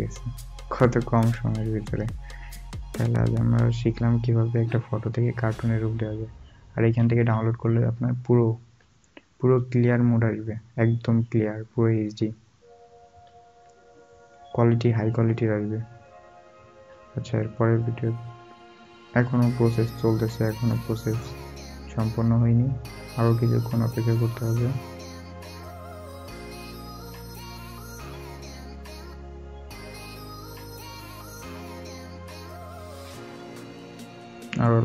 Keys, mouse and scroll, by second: 2.3-3.0 alt+scroll, 4.0-4.5 alt+scroll, 4.5-4.8 alt+scroll up 1, 7.1 scroll, 7.1 scroll up 1, 8.0 alt+scroll, 8.0 alt+scroll down 1, 9.0 alt+scroll, 9.1 alt+scroll down 1, 9.9 alt+scroll up 1, 11.3 alt+scroll down 1, 14.8-15.2 alt+scroll up 1, 18.9 scroll down 1, 23.1 scroll up 1, 29.5 scroll up 1.